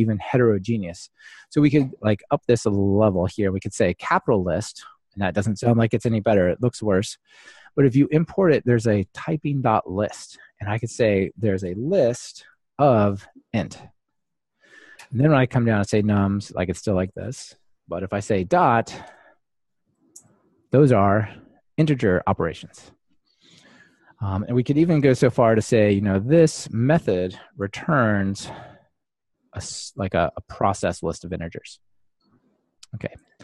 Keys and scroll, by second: 7.4 alt+Return, 14.1 Escape, 25.3 Escape, 29.2 Escape, 29.2 ctrl+alt+shift+Left, 30.3 super+c, 31.1 super+v.